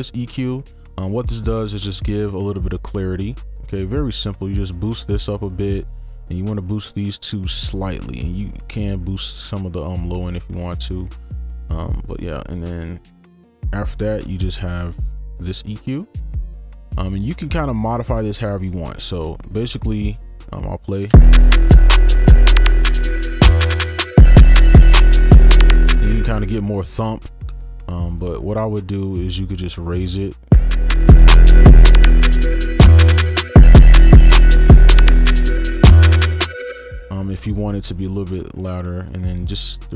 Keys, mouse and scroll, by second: 2.6 i, 28.2 right click, 30.5 space, 36.4 space.